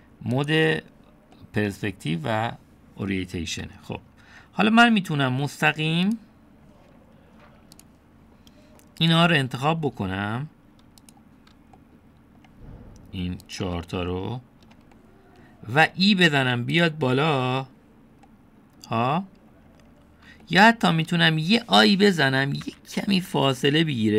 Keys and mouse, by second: 0.2 click, 0.7 click, 1.4 click, 2.4-4.6 middle drag, 8.8 click, 10.0 click, 12.8 middle click, 15.2 click, 16.0 shift+click, 17.8 shift+click, 19.4 click, 20.9 middle click, 21.5 shift+click.